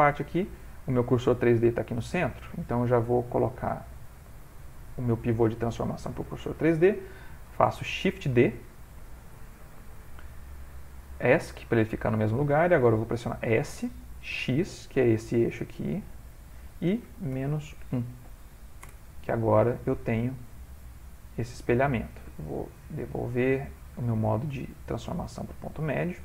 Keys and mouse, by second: 0.0 shift+middle click, 1.7 shift+middle click, 3.6 click, 7.5 shift+d, 13.4 s, 18.8 typing, 19.8 shift+middle click, 20.8 middle click, 21.9 typing, 22.8 click, 25.4 middle click, 25.5 middle click.